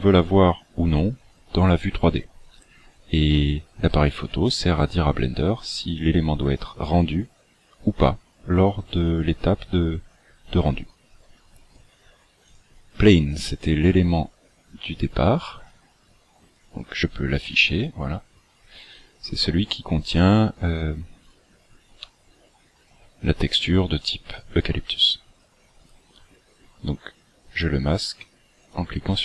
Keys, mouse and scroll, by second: 12.4 click, 13.4-14.3 scroll down 14, 14.5-15.4 scroll up 11, 16.6 click, 17.4-18.4 scroll down 8, 18.4-18.8 scroll up 4, 18.8-19.3 scroll down 1, 19.3 scroll down 1, 21.4 click, 25.4-27.0 scroll up 1, 28.6 click.